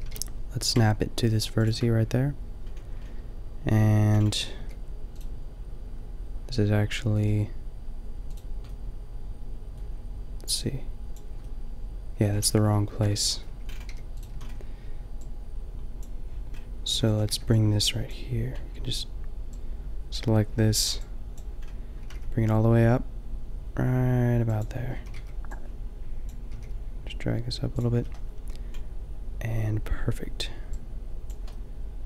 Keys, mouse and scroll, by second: 0.0 g, 1.7-3.4 drag, 4.1 middle click, 4.7 g, 5.2-7.2 drag, 7.2 g, 9.2-10.4 drag, 11.7 middle click, 12.5 ctrl+z, 12.7 ctrl+z, 12.8 ctrl+z, 14.0 g, 14.3 a, 16.9 a, 17.0 a, 17.3 b, 21.8 middle click, 22.0 g, 22.7-23.9 drag, 24.6 middle click, 24.9 a, 25.1 b, 26.5 g, 27.9 a, 31.6 middle click.